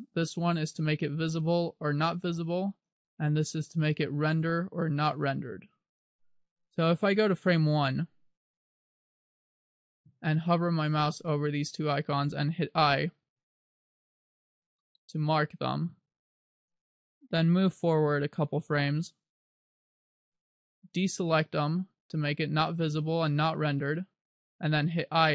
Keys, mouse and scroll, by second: 9.4 click, 13.4 i, 14.8 i, 17.5 click, 21.9 click, 24.0 click, 24.7 i.